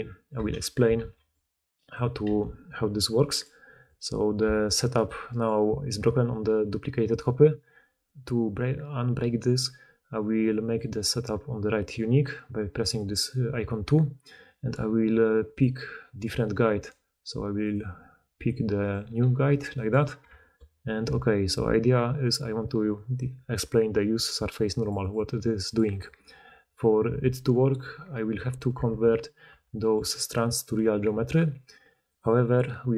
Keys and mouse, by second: 0.9 shift+d, 1.9-4.9 middle drag, 2.2 g, 4.9 click, 5.0-7.9 middle drag, 7.9 click, 10.5-16.2 drag, 16.2-16.7 middle drag, 16.7 click, 18.7 click, 19.1 g, 19.9 click, 20.2-24.1 shift+middle drag, 24.1 click, 24.2 middle click, 24.7 click, 25.1 middle click, 25.5 click, 25.9-28.5 middle drag, 28.5 click, 28.5-32.9 middle drag, 28.7 Tab, 29.5 Tab.